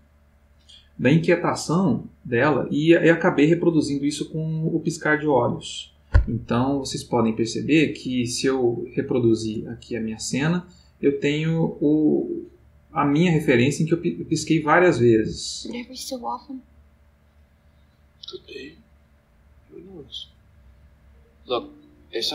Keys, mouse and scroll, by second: 6.8 click, 7.7 click, 9.0 click, 10.3-14.9 drag, 15.5 space.